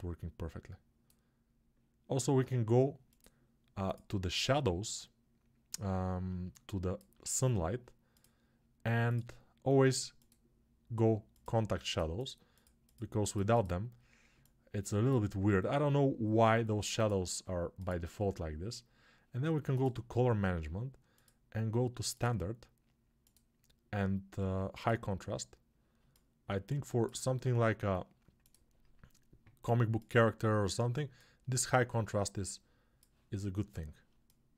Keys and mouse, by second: 14.2-25.9 alt+shift+right drag, 34.0-34.5 alt+drag, 34.0-34.5 alt+right drag.